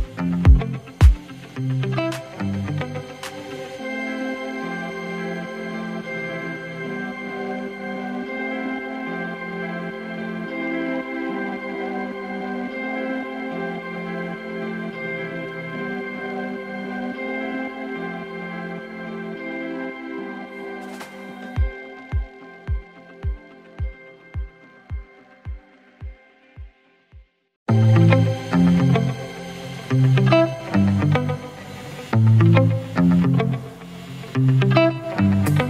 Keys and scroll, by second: 0.7 ctrl+d, 1.8 space, 5.1 v, 19.8 Delete, 24.5 ctrl+d, 26.5 ctrl+t.